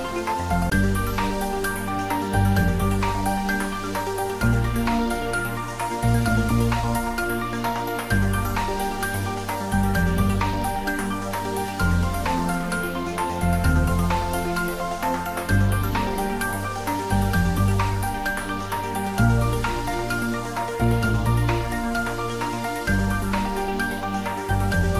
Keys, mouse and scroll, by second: 1.3 shift+click, 2.7 scroll down 1, 3.6-4.3 scroll up 1, 5.9-8.2 middle drag, 8.2-9.6 scroll up 1, 9.9-11.4 drag, 12.7 ctrl+z, 15.1 ctrl+z, 16.5 shift+click, 19.2 shift+click, 22.8 shift+click, 24.5 ctrl+z.